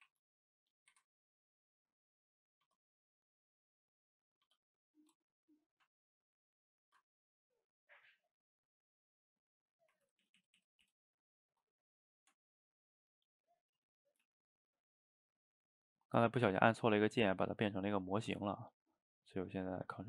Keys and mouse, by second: 0.0 ctrl+t, 1.5-2.7 middle drag, 3.4 click, 3.9 click, 5.4 middle click, 5.7 Tab, 6.9 Tab, 8.3-10.1 middle drag, 10.1 ctrl+z, 10.3 ctrl+z, 11.8-12.2 middle drag, 12.2 Tab, 13.1 click, 13.3-13.9 middle drag, 13.9 shift+click, 14.3 g, 15.3-17.4 middle drag, 17.4 drag, 17.8 shift+click, 18.2 shift+click, 18.5-19.6 middle drag, 19.6 g.